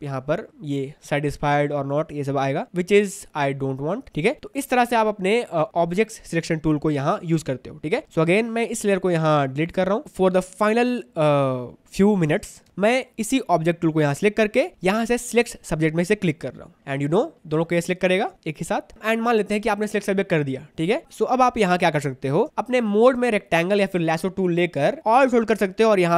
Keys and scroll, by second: 10.0 ctrl+alt+space, 12.7 v, 13.0 space, 18.9 ctrl+alt+space, 21.0 ctrl+alt+space.